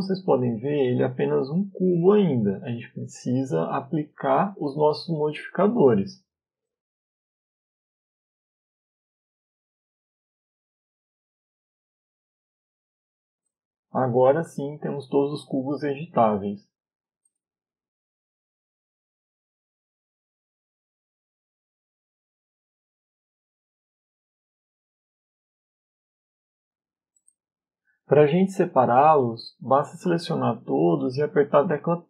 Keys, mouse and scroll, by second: 21.9 n, 25.1 Tab, 25.5 middle click, 29.2 middle click.